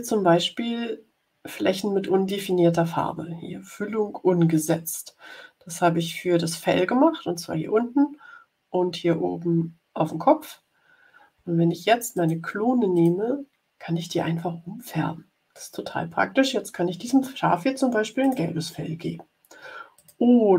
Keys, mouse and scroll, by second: 12.1 click, 12.9 click, 18.1 click, 19.9 click.